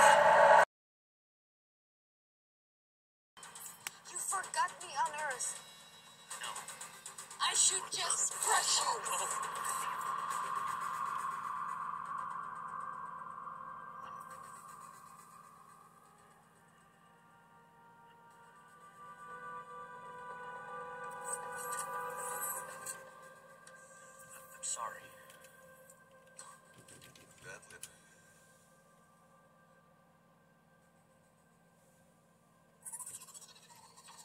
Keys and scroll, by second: 3.5 typing, 6.0-8.3 typing, 11.1 super+1, 13.8-15.0 typing, 24.1 super+7, 25.3 super+Return, 26.4-27.9 typing, 33.6 ctrl++.